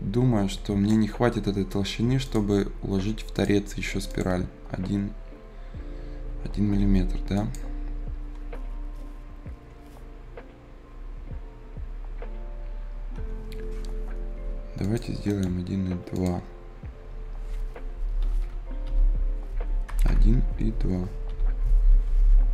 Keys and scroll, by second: 14.3 Delete, 17.9-20.1 typing, 21.2 b.